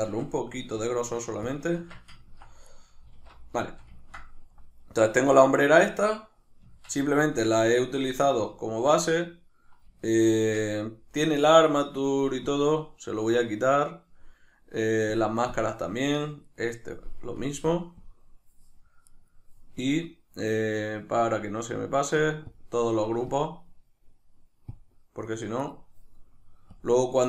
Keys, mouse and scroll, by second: 0.0 alt+s, 1.5 shift+click, 1.8 Tab, 2.2-2.7 ctrl+middle drag, 2.7 right click, 3.2 alt+q, 3.7-12.5 shift+middle drag, 6.7 Tab, 10.4 Tab, 12.5-16.5 drag, 16.5 right click, 17.4-19.1 drag, 19.1 right click, 22.5-25.6 drag, 25.6 right click, 26.7-27.2 drag.